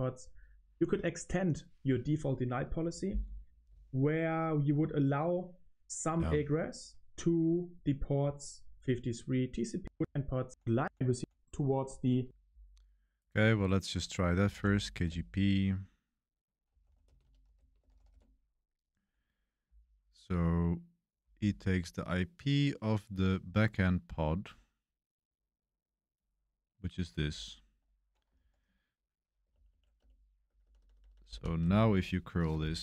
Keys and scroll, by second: 7.1 typing, 9.7-12.0 typing, 14.2-15.0 typing, 16.5-18.5 typing, 28.3 ctrl+r, 29.4 Page_Up, 29.6 Page_Up, 29.9 Return, 30.4-31.2 typing, 31.1 Up, 31.5 super+v, 32.5 Return.